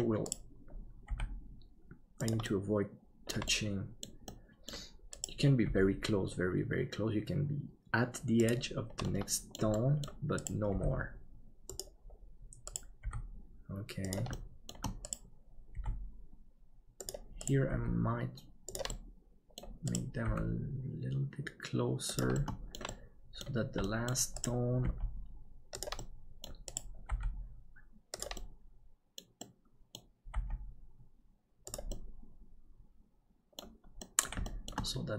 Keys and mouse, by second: 2.6 middle click, 3.6 middle click, 4.3 middle click, 5.6 g, 9.1 middle click, 9.8 middle click, 10.7 g, 12.7 right click, 13.0 g, 14.5 shift+middle click, 17.1 g, 19.0 middle click, 22.6 middle click, 22.9 middle click, 23.9 middle click, 24.8 g, 26.0 middle click, 27.1 g, 28.5 middle click, 29.6 middle click, 30.3 g, 32.1-33.6 middle drag, 34.1 middle click, 34.6 shift+middle click.